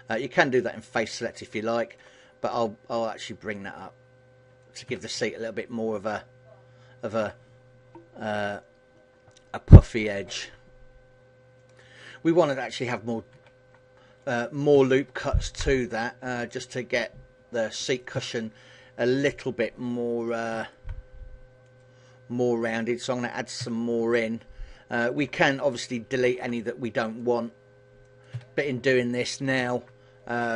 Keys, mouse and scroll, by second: 0.5 shift+right click, 0.8 middle click, 2.8 click, 4.6 a, 5.0 middle click, 13.8 click, 14.9 ctrl+r, 17.6 click, 17.8 a, 20.2 ctrl+r, 23.1 click, 23.7 a, 23.8 middle click, 25.8 ctrl+r, 27.9 click, 27.9 a, 29.2 ctrl+r.